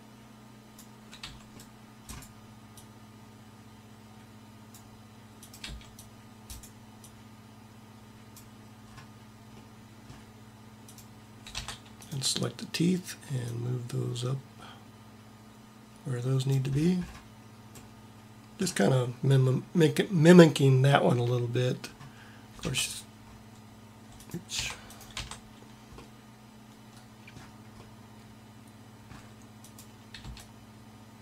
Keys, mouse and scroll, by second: 1.1 c, 2.8-4.4 drag, 5.6 c, 7.1-8.4 drag, 11.5 Tab, 13.5-15.3 drag, 22.6 Tab, 24.5 Tab, 25.1 Tab, 30.1 c.